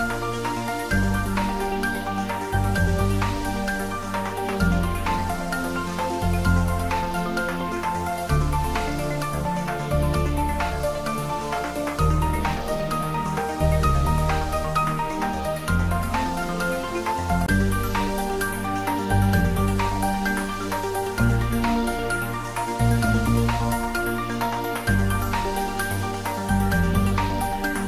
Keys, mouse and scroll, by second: 1.9 click, 9.9 click, 11.0 alt+shift+click, 14.7-15.6 shift+scroll down 1, 16.2-17.2 scroll down 1, 18.0-19.2 scroll up 1, 20.9 click, 23.6 alt+shift+click.